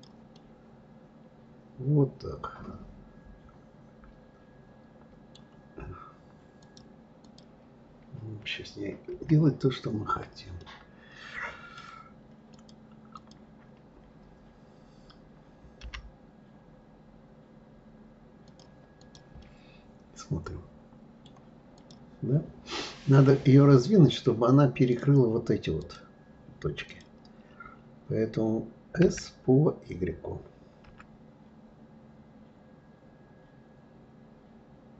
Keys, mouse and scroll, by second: 0.3-3.3 middle drag, 6.6 click, 6.7 right click, 7.2 click, 9.1 KP_1, 10.6-12.5 middle drag, 12.5 click, 13.1 click, 15.8 g, 19.0 click, 19.4-21.8 middle drag, 21.8 click, 23.1 click, 24.9 click, 25.8 click, 26.9 click, 29.1 s.